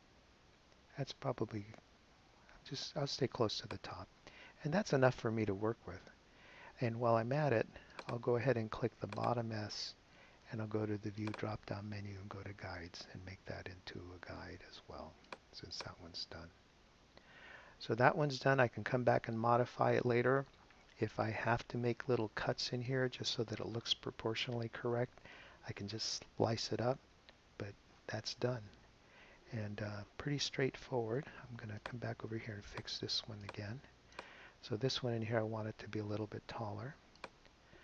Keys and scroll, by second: 28.7 super+0, 31.1 space.